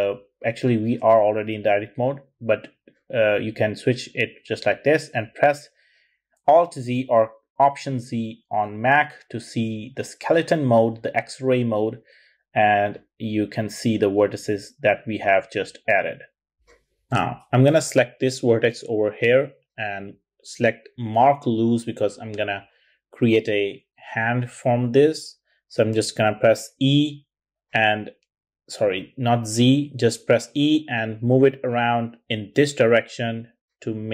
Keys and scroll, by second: 5.1 alt+z, 23.7 e, 24.3 z, 25.8 z, 26.9 e, 28.2 super+z, 28.8 e.